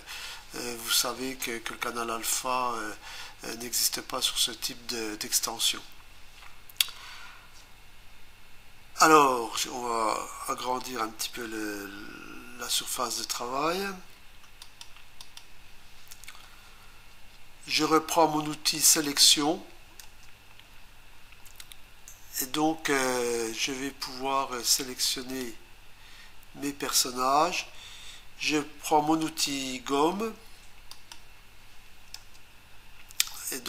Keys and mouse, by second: 14.7 click, 15.2 click, 18.9 click, 20.1 Return, 25.1 click, 30.9 click, 32.2 Return.